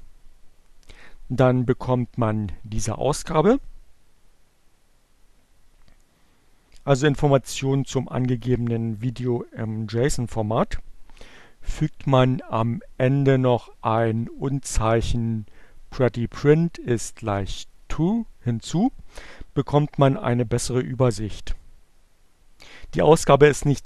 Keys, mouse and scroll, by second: 11.0 click, 12.8 shift+6, 15.3 Return.